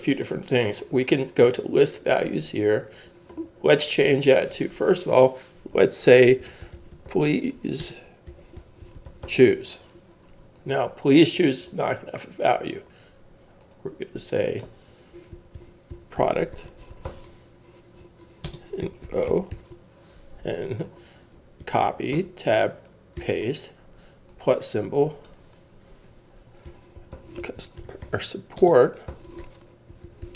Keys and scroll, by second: 6.2-10.8 typing, 15.1-20.9 typing, 21.6 super+c, 22.1 Tab, 23.2 super+v, 26.4-30.3 typing.